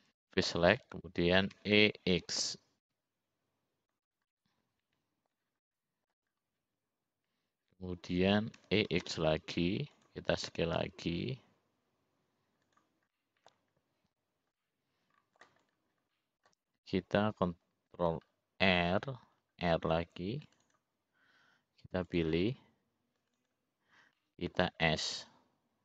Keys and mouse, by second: 0.0 click, 0.6 click, 3.1 e, 5.8-6.9 middle drag, 7.3 middle click, 10.4 e, 12.5 s, 15.0 middle click, 16.3 middle click, 17.4 click, 18.0 middle click, 19.6 ctrl+r, 24.0 click, 25.4 click.